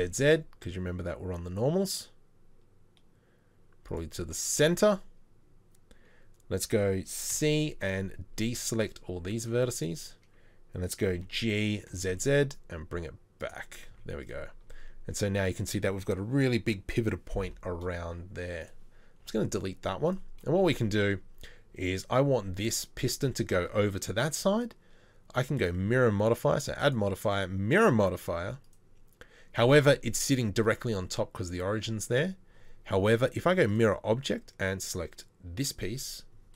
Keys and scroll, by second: 7.3 c, 11.2 g, 13.9 z, 14.7 Tab, 19.2 Delete.